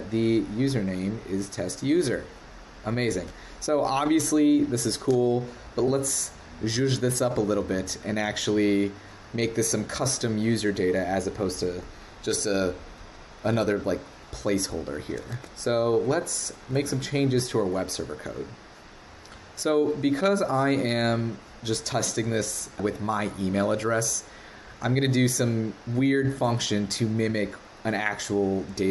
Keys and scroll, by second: 13.5 super+Tab, 15.3 super+Tab, 16.7 super+Tab.